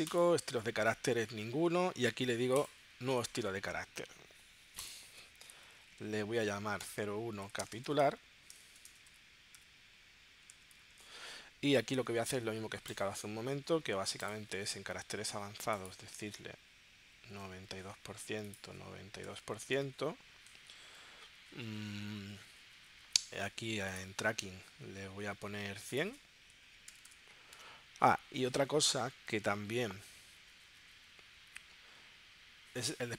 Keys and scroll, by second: 6.8 0, 10.4-12.0 typing, 17.3 9, 19.2 9, 26.7 1.